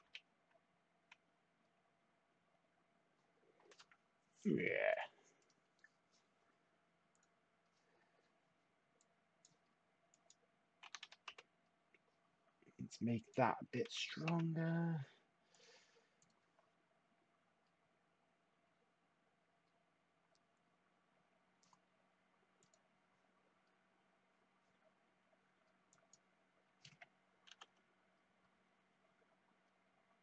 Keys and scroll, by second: 0.0 1, 0.0 Tab, 10.6-11.5 typing, 13.5-14.2 typing, 27.4 typing.